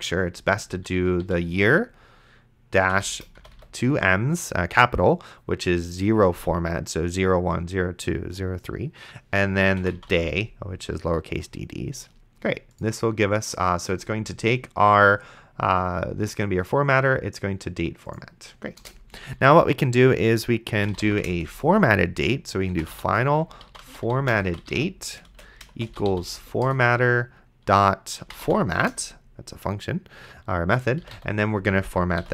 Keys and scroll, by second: 0.5 y, 2.9 =, 3.6 shift+m, 10.0 d, 19.1 Return, 20.5-26.9 typing, 26.6 Return, 28.0-28.9 typing, 30.7-32.3 typing, 32.2 End.